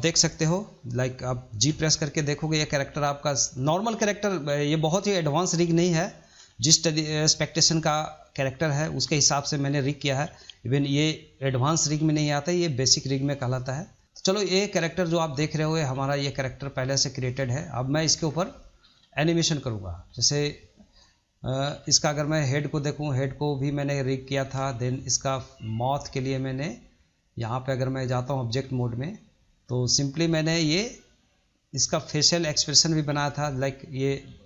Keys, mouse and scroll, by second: 6.3 scroll up 2, 6.5-8.4 shift+middle drag, 8.4 click, 8.7 middle click, 9.1 scroll down 1, 9.3-10.8 shift+middle drag, 10.8 g, 14.0 middle click, 14.3 scroll up 2, 14.5-15.7 shift+middle drag, 15.7 click, 16.0 middle click, 16.7 click, 18.0 ctrl+z, 18.2 scroll down 2, 18.4 middle click, 18.8-19.1 scroll up 1, 19.1-19.8 shift+middle drag, 19.8-20.1 drag, 20.1-21.6 middle drag, 21.6 r, 23.7-24.0 scroll up 3, 24.0-24.4 shift+middle drag, 24.6 shift+middle drag, 24.9-25.7 drag, 26.1-27.4 middle drag, 27.4-28.4 drag, 28.4 middle click, 28.7-30.0 drag, 30.0-31.5 shift+middle drag, 31.5-34.4 drag.